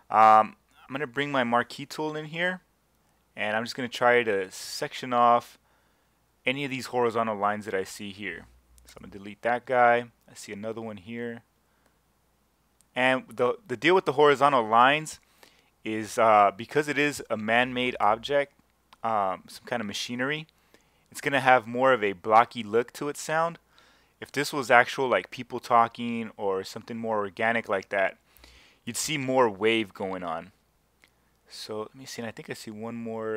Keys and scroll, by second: 8.9 BackSpace, 18.0 BackSpace, 28.9 BackSpace.